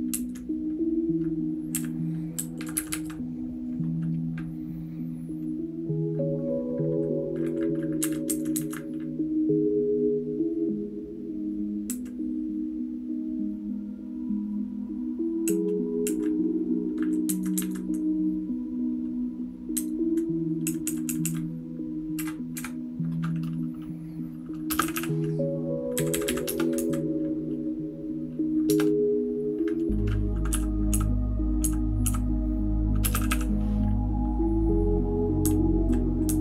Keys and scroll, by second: 0.1 Up, 1.7 Down, 2.3 Right, 2.5 Right, 2.7 Right, 2.9 Right, 8.0 Up, 8.2 Up, 8.5 Up, 11.9 Down, 15.4 Down, 16.0 Down, 17.2 Up, 17.5 Up, 19.7 Up, 20.6 Down, 21.0 Down, 21.2 Down, 22.1 *, 22.5 *, 24.7 space, 24.8 e, 24.9 e, 25.9 Down, 26.1 Down, 26.2 Down, 26.4 Return, 26.7 Down, 28.7 Return, 30.5-33.3 typing, 35.4 Down, 36.2 Down.